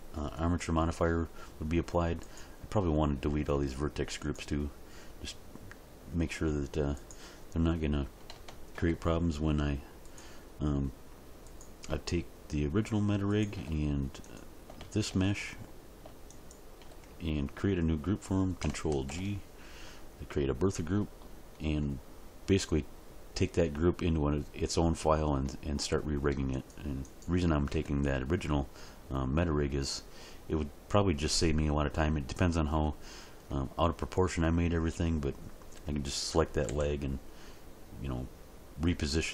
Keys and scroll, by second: 19.0 ctrl+g, 27.7 Tab, 36.7 g.